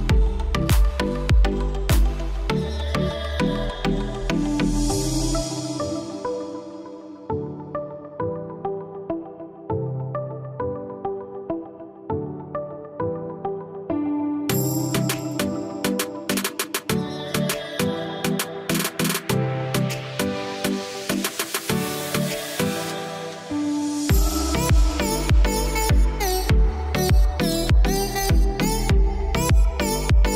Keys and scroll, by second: 11.0 ctrl+j, 22.9 space.